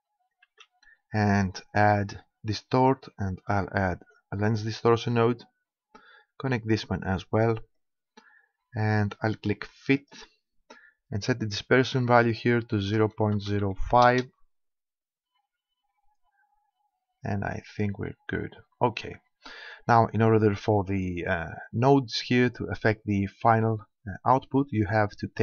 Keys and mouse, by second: 0.4 shift+a, 5.2-7.1 drag, 7.8-9.4 drag, 10.0-11.8 drag, 11.9-13.6 drag.